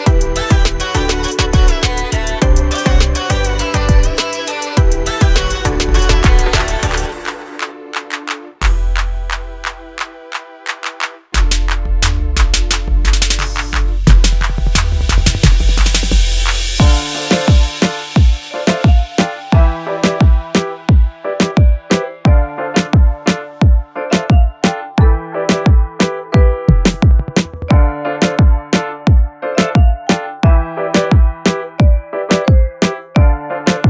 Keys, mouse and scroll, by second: 2.8 scroll, 3.2 scroll up 1, 6.3 click, 8.3 j, 12.7 click, 16.1 l, 19.9 space, 25.9 click, 26.3 scroll down 1, 26.9 click, 27.9 ctrl+click, 30.8 click, 32.0 u, 32.9 k.